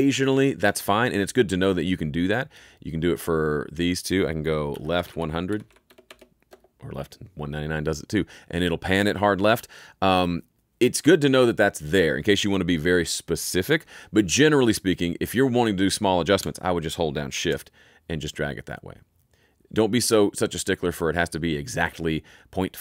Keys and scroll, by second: 4.4-5.9 typing, 6.4 Return.